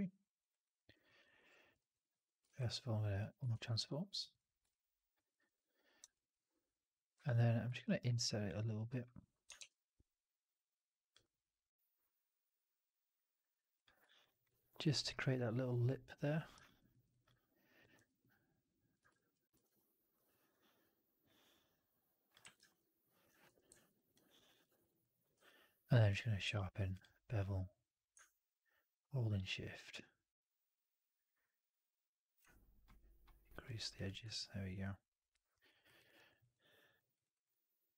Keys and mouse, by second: 0.4 alt+right drag, 0.6 drag, 0.9-1.5 middle drag, 1.7 click, 2.3 shift+Tab, 3.4 shift+Tab, 4.6-5.0 alt+drag, 5.2 alt+middle drag, 6.0 alt+click, 7.7 right click, 8.0 click, 9.5 shift+Tab, 14.1 alt+click, 14.2 alt+middle click, 16.5 alt+middle click, 16.8 alt+middle click, 17.1 alt+click, 18.9 w, 19.0 alt+click, 19.4 ctrl+e, 21.8 click, 22.3 w, 22.5 alt+right click, 22.6 alt+click, 23.3 4, 23.8 alt+drag, 23.8 alt+middle drag, 24.0 alt+drag, 24.4 alt+middle drag, 24.5 alt+click, 24.7 alt+right click, 24.9 alt+click, 25.2 q, 26.3 q, 34.8-35.6 alt+drag, 35.7 alt+middle drag, 35.9 alt+right click, 36.2 alt+right drag, 36.4-36.8 alt+drag, 37.0 alt+right drag, 37.2 alt+right drag, 37.4-37.9 alt+drag.